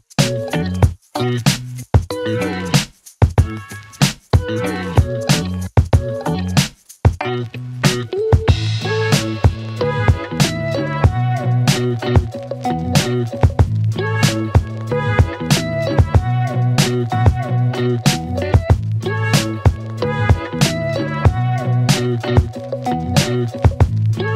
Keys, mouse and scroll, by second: 6.5 n, 8.7-10.2 click, 12.1 F9, 13.7-14.8 click, 15.5 space, 21.3 space, 22.0 click, 23.0 click.